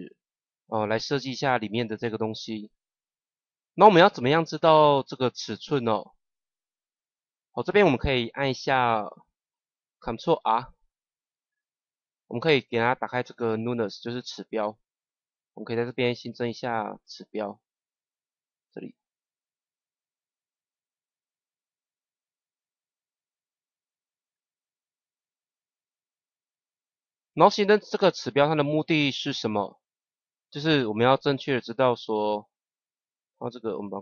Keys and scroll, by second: 10.3 ctrl+r.